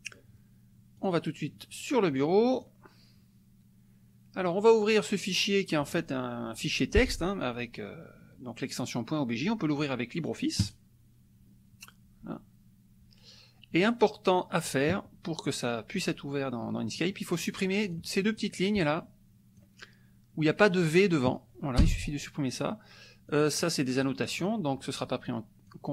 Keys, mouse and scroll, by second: 1.1 click, 2.5 click, 4.4 right click, 10.6 click, 16.9 click, 17.8-19.7 drag, 21.8 BackSpace, 23.3 click, 24.0 click, 25.2 click.